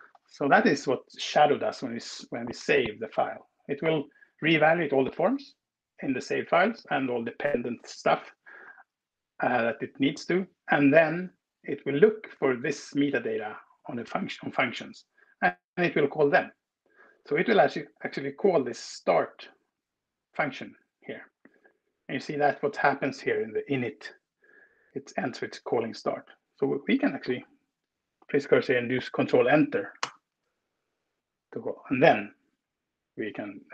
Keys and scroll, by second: 29.8 ctrl+Return.